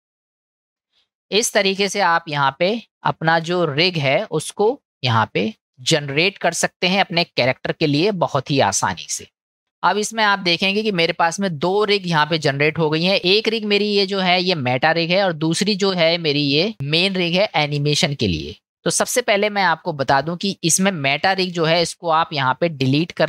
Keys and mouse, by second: 2.7-4.4 middle drag, 8.1-9.4 middle drag, 11.9-13.2 middle drag, 14.5-15.1 middle drag, 16.7-19.5 middle drag.